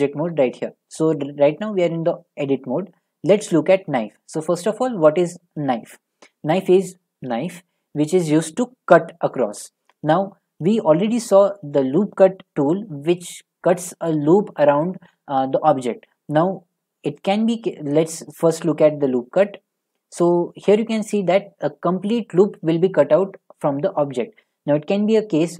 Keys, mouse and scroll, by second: 0.2 Tab, 17.3-20.3 drag.